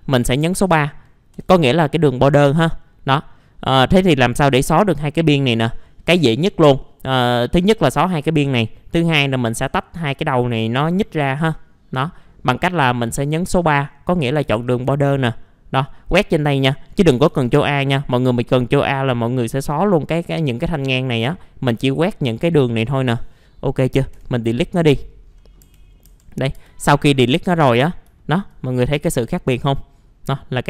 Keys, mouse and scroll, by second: 0.3 scroll up 1, 1.3 3, 2.8 middle click, 3.9-4.4 scroll up 1, 7.3 alt+middle click, 12.0-12.4 scroll down 1, 12.4 middle click, 12.5 scroll down 1, 13.2 middle click, 14.4 typing, 15.2 middle click, 15.4 scroll up 1, 16.1 click, 16.9 scroll down 1, 17.3 ctrl+a, 17.9-18.6 scroll down 1, 18.6-20.5 scroll up 1, 20.6-20.9 scroll down 1, 20.9 middle click, 21.3-21.7 scroll up 1, 21.7 click, 22.9-24.1 scroll up 1, 24.1 Delete, 25.2 scroll down 1, 25.6 F3, 26.4 middle click, 26.5 F4, 26.9 scroll down 1, 27.3 alt+middle click, 27.8 scroll up 1, 28.2 alt+middle click, 29.4-30.5 scroll up 1.